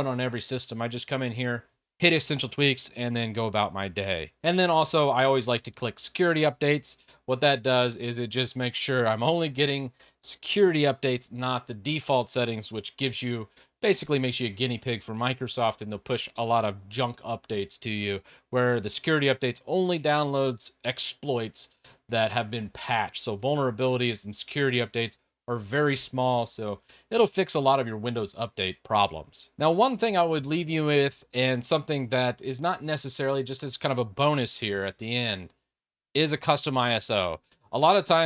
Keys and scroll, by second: 4.5 alt+Tab.